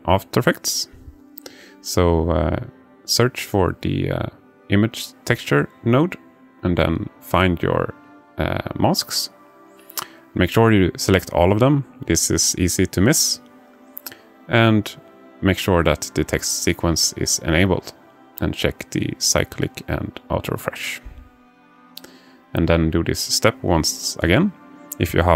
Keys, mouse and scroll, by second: 4.0 shift+a, 8.7 click, 23.3 click, 24.6 click.